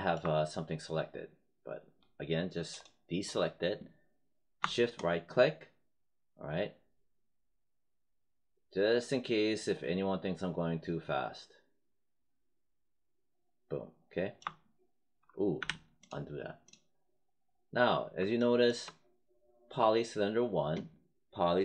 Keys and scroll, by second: 15.5 z.